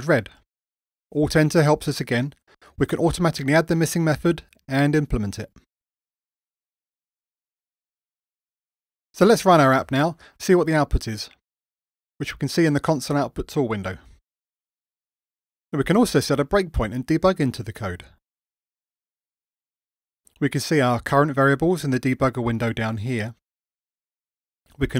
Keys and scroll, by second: 1.3 alt+Return, 5.6 alt+Return, 9.2 ctrl+r, 17.0 ctrl+d.